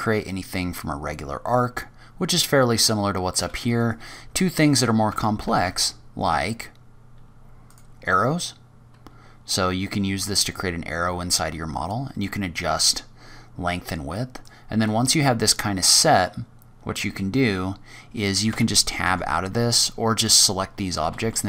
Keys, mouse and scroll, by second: 0.4-0.8 scroll down 2, 0.8-1.6 scroll up 4, 1.6-2.7 scroll down 4, 2.7-3.1 scroll down 6, 3.0-3.5 scroll up 2, 4.1 shift+right click, 5.0 Tab, 5.4 shift+a, 8.2-9.1 scroll up 6, 9.1-9.8 scroll down 3, 10.2 click, 12.6 click, 14.8 click, 18.3 Tab, 18.9 Tab, 19.7 click, 20.9 g.